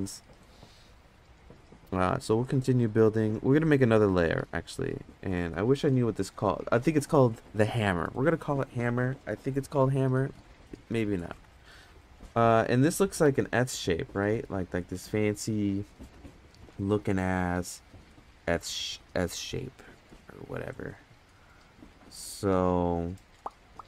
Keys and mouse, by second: 4.1 click, 5.7-6.4 middle drag, 7.9 click, 8.1-13.2 drag, 10.3 m, 14.2 middle click.